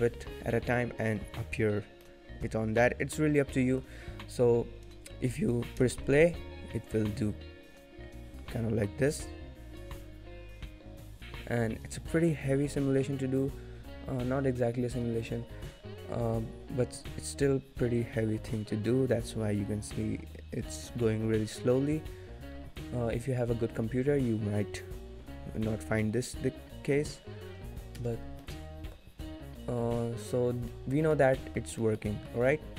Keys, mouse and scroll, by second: 0.3 scroll down 1, 0.5 middle click, 2.0 middle click, 5.7 space, 28.6 space, 28.7 middle click, 29.2 middle click, 30.3 scroll up 1, 30.5 scroll down 1, 30.7 middle click, 31.1 shift+middle click, 31.3 middle click, 31.8 shift+middle click, 32.1 middle click.